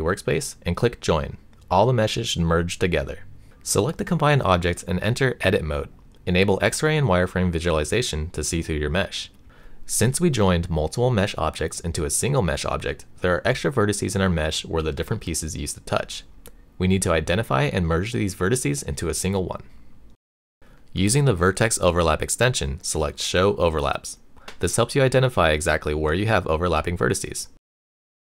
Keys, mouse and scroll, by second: 1.9 click, 2.1 Delete, 3.3 click, 3.8 click, 4.7 Tab, 6.9 click, 7.5 middle click, 8.8 click, 9.3 middle click, 11.0 shift+middle click, 12.1 shift+middle click, 13.4 click, 15.7-16.8 drag, 22.9 shift+middle click, 24.2 click, 25.2 click, 26.6 click, 27.3 shift+middle click.